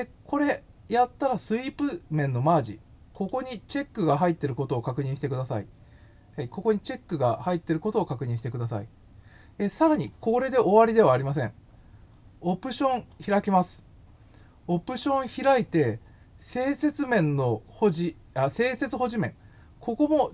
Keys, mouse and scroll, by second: 2.5 click, 3.1 click, 8.4-9.9 drag, 13.0 click.